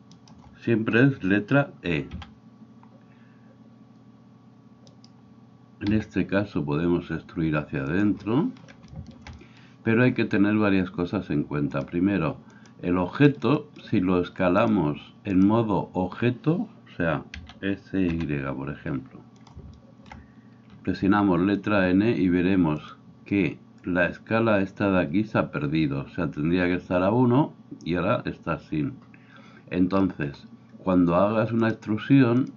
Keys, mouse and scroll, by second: 0.2 shift+middle click, 0.2 shift+right click, 2.1 e, 5.9 s, 8.1-11.8 middle drag, 11.8-19.5 drag, 17.4 s, 19.5-22.7 shift+middle drag, 21.0 n, 22.7 click, 22.9-31.8 middle drag, 31.8-32.5 drag.